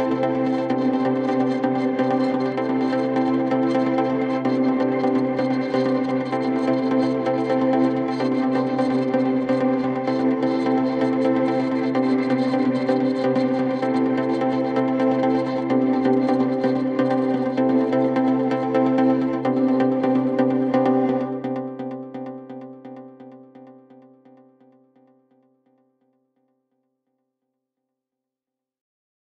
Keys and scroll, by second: 0.1 F3, 1.1 ctrl+d, 1.3 Escape, 2.9-6.4 typing, 10.7 4, 12.2 p, 13.2 2, 13.7 3.